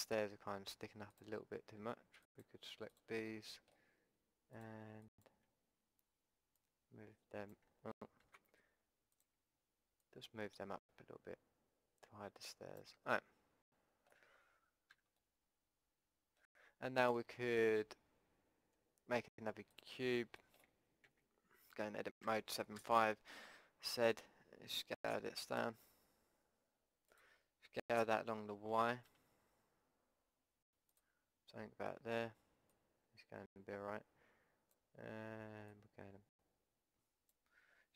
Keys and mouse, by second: 3.3-6.8 middle drag, 6.8-8.2 right drag, 8.2 ctrl+z, 8.4 middle click, 9.1-11.8 middle drag, 11.9 click, 14.9 a, 15.4 middle click, 17.2-19.7 middle drag, 17.7 Tab, 20.4 right click, 21.1 Tab, 22.2 KP_7, 22.7 KP_5, 23.9 z, 25.1 s, 27.9 s, 32.7-34.7 drag, 35.7-37.7 drag.